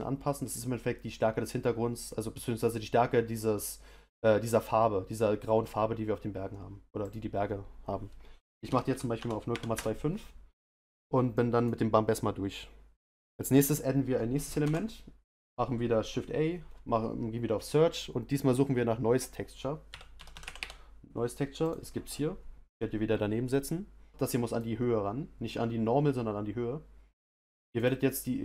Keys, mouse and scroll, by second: 24.6 click.